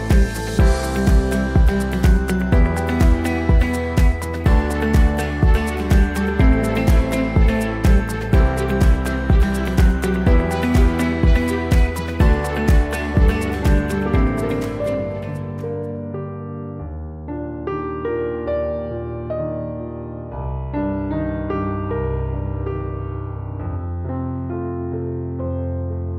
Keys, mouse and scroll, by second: 0.9 middle click, 1.0 right click, 1.2-3.6 middle drag, 3.6-6.4 right drag, 5.0 Tab, 6.4 middle click, 6.5 right click, 7.2-14.7 middle drag, 14.7-26.1 right drag, 19.8 Tab, 21.8-26.1 drag.